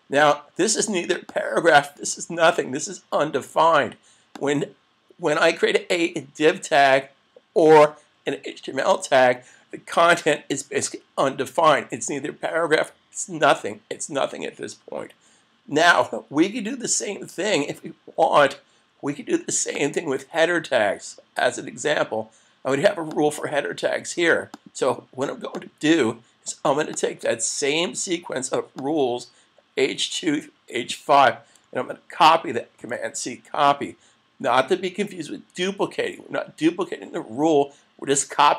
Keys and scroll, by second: 32.8 super+c.